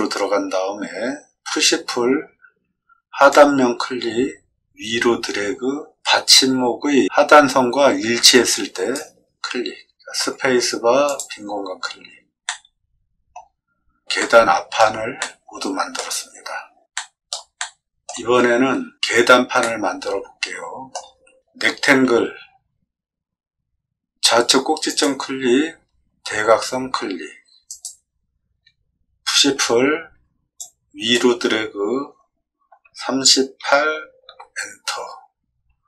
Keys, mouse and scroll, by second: 1.4 p, 3.3-8.9 drag, 10.1 space, 11.0 click, 12.4 middle click, 14.1 shift+middle click, 15.1 middle click, 16.9 shift+middle click, 17.5 middle click, 19.6-20.9 shift+middle drag, 22.0 r, 24.8 click, 27.6 click, 29.6 p, 30.5 click, 32.8 3, 33.6 8, 34.2 Return.